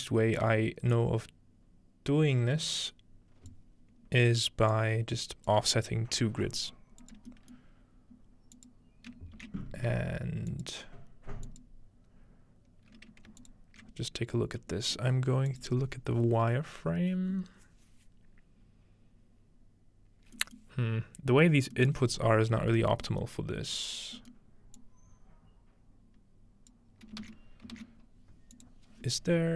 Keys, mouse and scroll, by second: 0.9-3.5 drag, 4.2-5.5 scroll up 1, 4.7-7.2 drag, 8.6 click, 9.4 shift+d, 10.5 shift+click, 11.0-12.1 drag, 12.1-13.1 scroll up 2, 13.4 alt+shift+click, 15.5 click, 16.2-17.4 scroll up 3, 17.4-20.3 scroll up 1, 20.6-22.8 middle drag, 22.6-24.2 scroll up 2, 24.2-24.8 scroll up 1, 24.8-26.7 drag, 27.2-27.8 typing, 28.6 click.